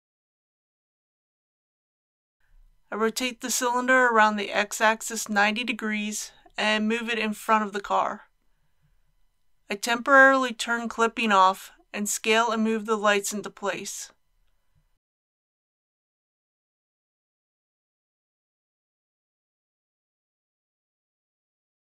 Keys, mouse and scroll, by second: 3.2-4.4 typing, 6.6 g, 6.9 y, 8.6 click, 9.5 shift+middle click, 11.6 click, 16.6 KP_1, 18.1 s, 18.4 x, 19.6 click.